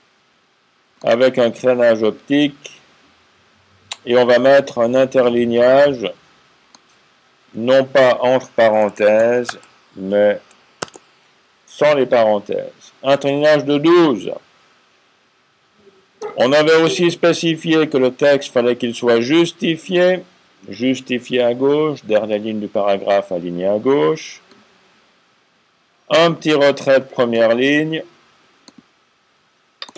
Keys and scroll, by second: 9.1 typing.